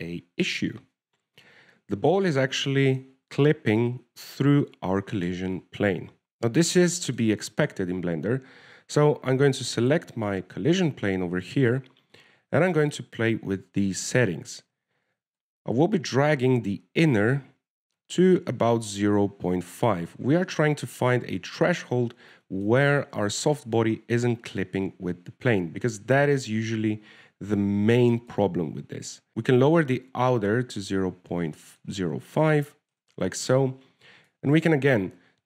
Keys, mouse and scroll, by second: 0.9 middle click, 1.3-2.0 scroll up 1, 2.0 scroll up 1, 2.7 KP_3, 3.5-3.9 scroll up 2, 4.0 shift+middle click, 8.1 middle click, 8.7 shift+middle click, 9.2 scroll down 1, 11.1 right click, 16.7 click, 21.8 middle click, 33.1 middle click, 34.0 middle click.